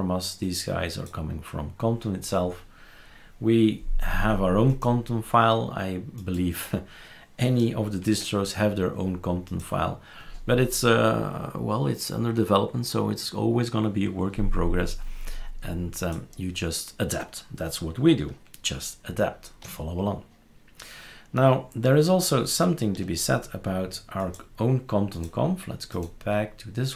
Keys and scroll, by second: 8.0 shift+super+q.